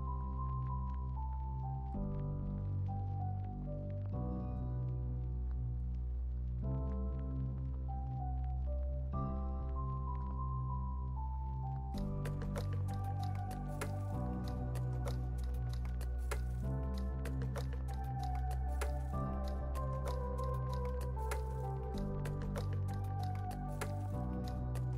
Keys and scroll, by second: 5.7 z, 7.0 x, 8.9 x, 9.5 z, 10.5-15.5 typing, 17.3-18.3 typing, 18.7 super+s, 19.5 z, 20.2 x, 21.7 x, 22.5 z, 23.5 x.